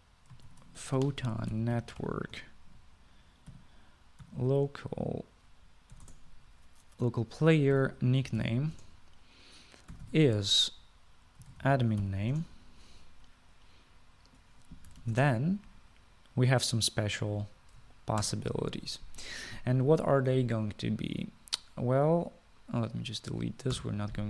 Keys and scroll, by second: 1.4-6.0 typing, 7.1 Down, 7.2 Return, 8.9-13.7 typing, 16.2 {, 16.3 shift+Return, 19.4 ctrl+s.